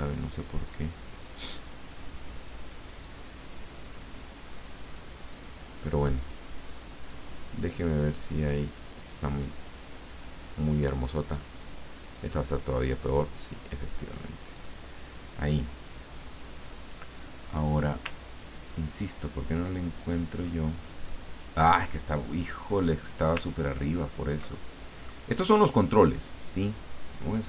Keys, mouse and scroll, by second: 3.0-4.5 drag, 6.3 click, 7.0 click, 8.0 click, 12.2 click, 13.4 click, 14.6 click, 19.0-20.0 ctrl+scroll down 4, 20.3-20.6 ctrl+scroll down 2, 22.4-22.9 scroll up 2, 22.9-23.4 scroll down 2, 23.5 ctrl+scroll up 2, 24.1-24.6 ctrl+scroll up 2, 24.6 ctrl+click, 24.9 middle click, 27.1-27.4 drag.